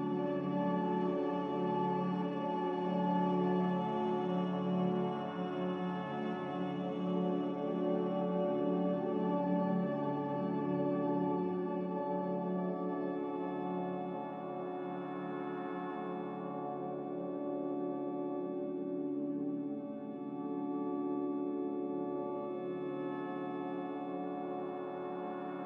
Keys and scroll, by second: 0.0-0.5 typing, 2.0 9, 2.0 5, 2.7 ctrl+c, 17.6 n.